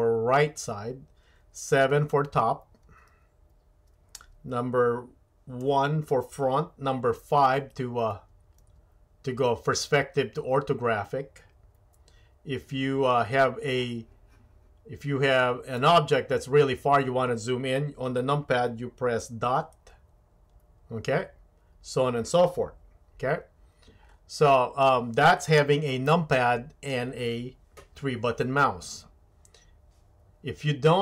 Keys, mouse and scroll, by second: 2.8 KP_7, 5.6 KP_1, 7.5 KP_5, 8.1 KP_5, 8.6 KP_5, 9.7 KP_5, 15.7 click, 19.8 KP_Decimal, 26.1-26.9 shift+middle drag.